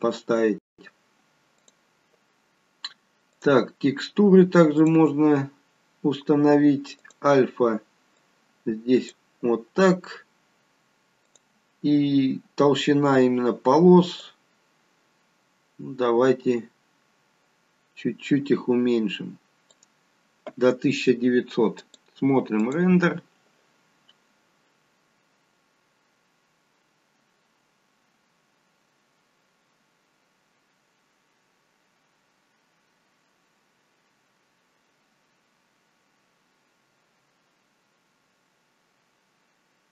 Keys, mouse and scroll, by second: 1.4 click, 3.4 click, 4.7 click, 6.9 click, 8.1 click, 11.1 click, 14.1 click, 21.7 click.